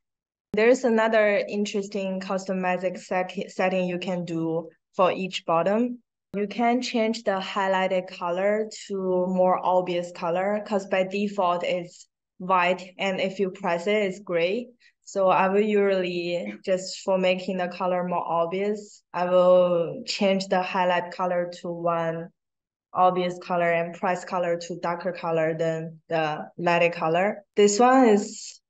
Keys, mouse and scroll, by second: 0.7 click, 2.0 click, 3.2-3.8 scroll down 1, 8.1-8.5 drag, 9.2-10.8 drag, 11.8 click, 16.0-16.5 drag, 17.0-17.7 drag, 18.5-19.6 drag, 20.8 click, 27.8-28.1 drag, 28.4-28.6 drag.